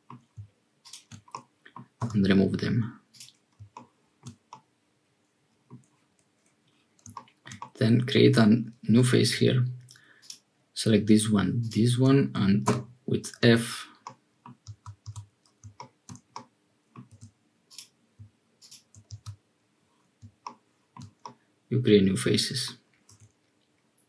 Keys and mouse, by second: 1.3 click, 2.0 x, 4.2 shift+click, 4.5-5.7 drag, 7.5 middle click, 14.0 middle click, 15.7 middle click, 16.3 middle click, 19.0 f, 21.3-22.7 middle drag, 23.1 1.